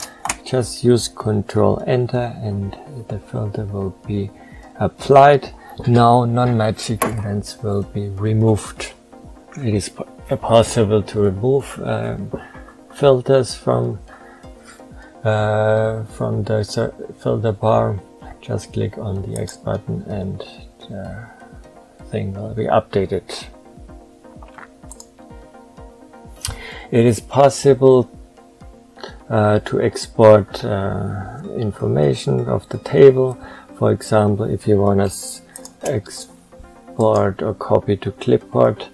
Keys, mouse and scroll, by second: 35.4 shift+click.